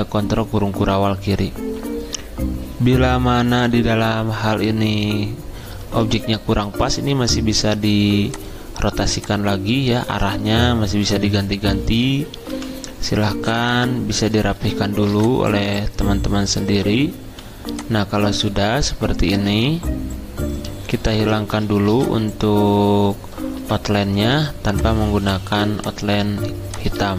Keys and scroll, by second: 6.0 r, 15.0 r, 17.2 v, 21.8 r, 24.8 v, 27.0 space.